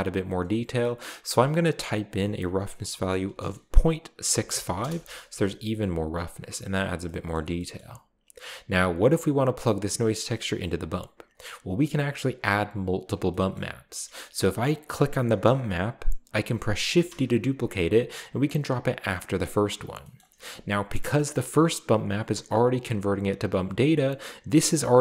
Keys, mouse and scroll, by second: 0.2 right click, 1.5 click, 2.1 click, 3.2 BackSpace, 4.3 typing, 4.8 Return, 7.0 middle click, 7.3 middle click, 7.4-8.3 scroll down 2, 7.8 middle click, 10.8 click, 13.2 scroll up 2, 14.4 click, 14.9 click, 16.8 shift+d, 18.9 click, 20.2 middle click, 20.5-21.1 scroll up 3, 21.1 click, 24.0 click, 24.7 click.